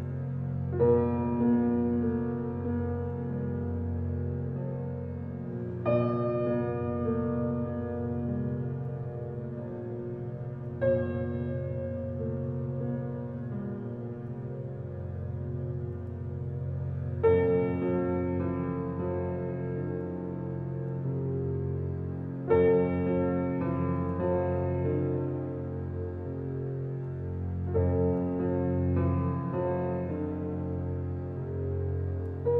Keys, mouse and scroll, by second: 0.6 g, 1.7 g, 3.4-4.7 scroll up 6, 3.7 shift+middle click, 4.7 g, 6.9-8.1 middle drag, 8.1-8.5 scroll down 1, 8.5 g, 10.2 s, 11.3 Tab, 12.1 f, 14.8 Tab, 15.1-16.0 middle drag, 16.0 click, 16.2-17.8 middle drag, 19.8 Tab, 20.5 click, 21.4 alt+z, 22.3 s, 24.1 scroll down 1, 24.4 Tab, 24.7-25.9 middle drag, 25.9 alt+z, 26.3 click, 26.5 right click, 27.2-27.9 scroll down 4, 27.4 click, 27.9-28.3 drag, 28.5 click, 28.7 scroll down 2, 28.9-30.5 middle drag, 30.8 click, 31.4 s.